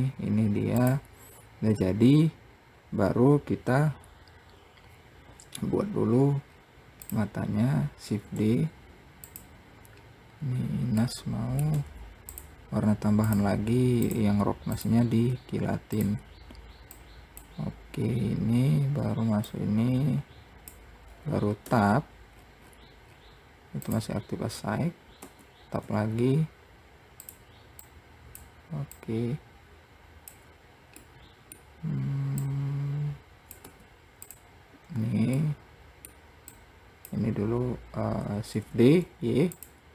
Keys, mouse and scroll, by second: 0.7-1.1 scroll down 1, 1.1 click, 6.4-6.7 scroll up 1, 6.7-7.3 scroll down 2, 7.3 click, 8.4 shift+d, 11.3 middle click, 13.6 click, 14.3-15.6 drag, 15.6-15.9 scroll down 2, 16.3 click, 18.3 scroll down 2, 19.8-21.4 drag, 21.4-22.0 scroll up 2, 22.0 Tab, 22.7-23.4 scroll up 10, 23.4-24.1 scroll down 2, 24.1-25.5 drag, 25.5 Tab, 28.2 click, 29.2 click, 31.3-32.7 middle drag, 32.7 click, 34.0 `, 35.7-36.9 middle drag, 36.9 click, 38.8 shift+d.